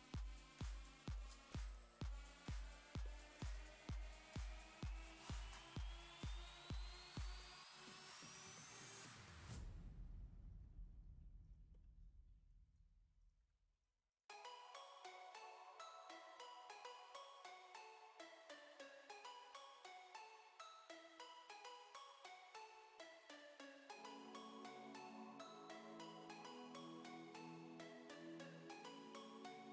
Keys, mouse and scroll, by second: 0.5 middle click, 1.1-2.7 scroll up 13, 1.5 middle click, 2.7 shift+middle click, 3.1 shift+middle click, 3.7-4.1 scroll up 2, 5.6 middle click, 6.1 scroll down 8, 6.4 shift+middle click, 6.8 scroll up 4, 7.1 middle click, 7.7 middle click, 8.2 middle click, 8.4 scroll up 1, 9.0 click, 9.4 middle click, 10.5 click, 11.4 click, 11.7 middle click, 13.2 middle click, 14.1 middle click, 15.1 middle click, 17.6 middle click, 18.0-19.3 middle drag, 19.3 click, 19.6 g, 20.4 click, 20.7 shift+click, 21.1 shift+click, 21.5 shift+click, 21.7 shift+click, 22.0 shift+click, 22.7 shift+middle click, 23.2-23.7 scroll up 2, 23.7 shift+click, 23.9 shift+click, 24.1 middle click, 24.6 g, 26.6 click, 26.8 g, 27.7 middle click, 29.0 middle click, 29.5-29.7 middle drag.